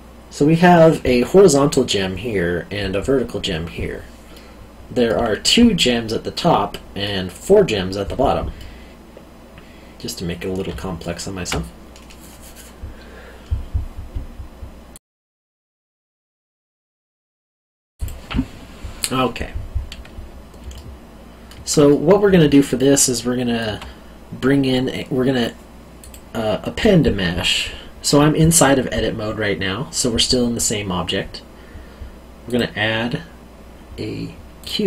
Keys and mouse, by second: 4.3 middle click, 8.5 middle click, 10.7 alt+middle click, 14.9 click, 18.0 click, 20.7 alt+middle click, 26.0 click, 32.4 click, 34.6 click.